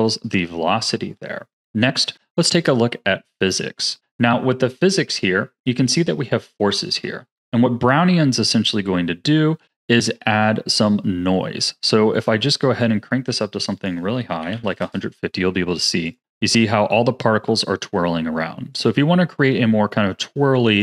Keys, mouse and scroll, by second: 1.1-5.3 drag, 5.5 scroll down 3, 12.1-18.5 drag, 18.7-20.8 drag.